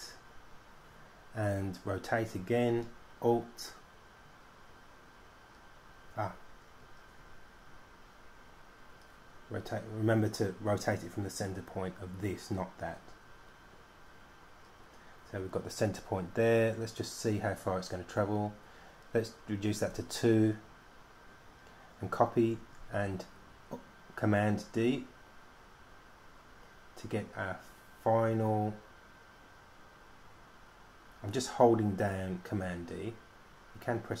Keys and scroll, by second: 20.1 2, 23.3 super+d, 23.7 super+d, 23.8 super+d, 23.9 super+d, 24.2 super+d, 24.3 super+d, 24.4 super+d, 24.7 super+d, 24.8 super+d, 24.9 super+d, 25.1 super+d, 25.9 super+d, 26.1 super+d, 26.3 super+d, 26.8 super+d, 27.3 super+d, 27.6 super+d, 28.1 super+d, 28.7 super+d, 29.2 super+d, 30.4 super+d, 31.5 super+d.